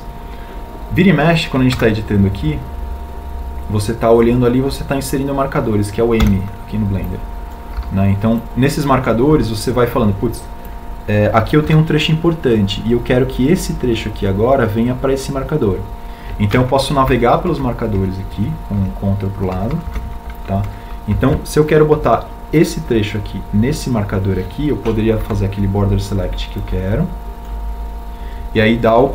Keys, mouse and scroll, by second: 5.2 w, 9.6 m, 11.1 m, 19.9 ctrl+Left, 21.5 ctrl+Right, 24.6 ctrl+Right, 28.5 b.